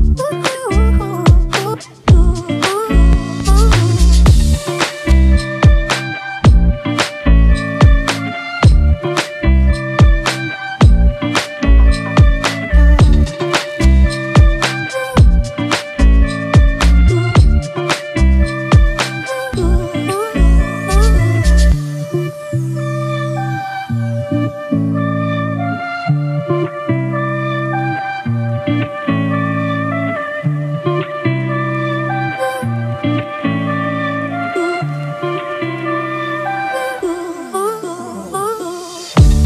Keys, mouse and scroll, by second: 1.6 right click, 3.0 double click, 3.8-4.7 typing, 5.5 right click, 6.3 double click, 15.7 double click, 22.7-25.0 scroll down 1, 28.1 alt+click, 33.5 double click, 37.4 ], 39.0 double click.